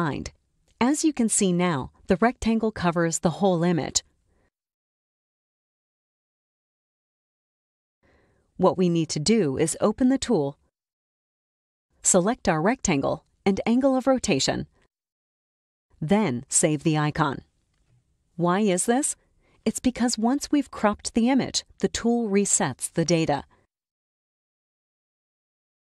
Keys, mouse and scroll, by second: 0.7 click, 5.9 click, 9.3 click, 12.0-14.0 scroll up 1, 14.3 click, 16.3-17.7 drag, 19.7 click.